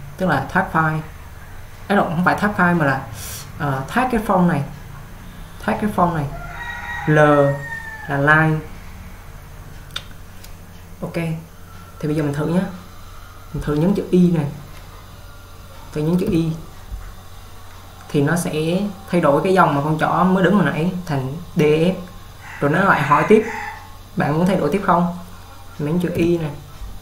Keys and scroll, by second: 16.5 y, 26.3 y.